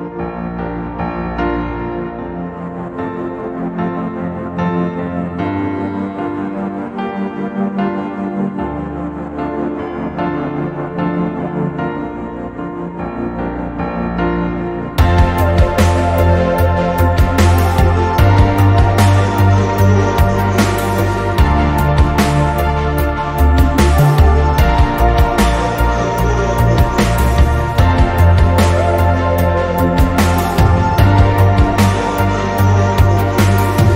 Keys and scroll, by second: 3.9 z, 27.2 e, 32.1 ctrl+0.